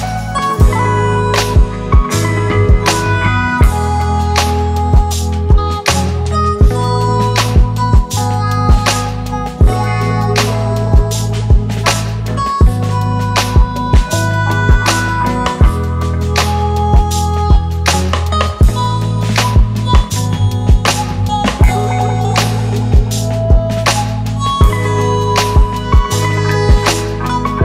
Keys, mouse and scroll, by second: 4.8 Return.